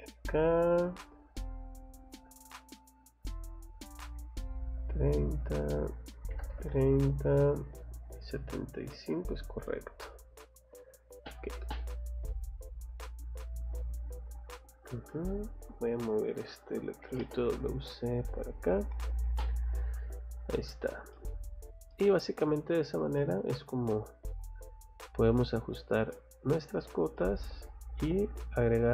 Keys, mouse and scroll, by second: 0.1 middle click, 0.7 click, 1.9 click, 3.2 click, 4.5 click, 5.3 click, 8.3 scroll up 1, 9.2 scroll down 1, 9.6 middle click, 10.0-10.3 scroll up 1, 11.2 scroll up 1, 11.4 click, 11.6 click, 12.6 click, 14.4 click, 14.9 middle click, 15.3 click, 15.4 Escape, 15.6 Escape, 16.0 click, 16.1 click, 17.0 m, 17.2 space, 17.6 click, 18.5 click, 19.0 Escape, 19.7 middle click, 20.1 scroll down 1, 20.5 middle click, 20.8 scroll down 1, 21.1 middle click, 21.5 scroll down 1, 21.9 middle click, 23.2 middle click, 24.9 scroll up 1, 25.5 scroll down 1, 26.1 middle click, 27.2 middle click.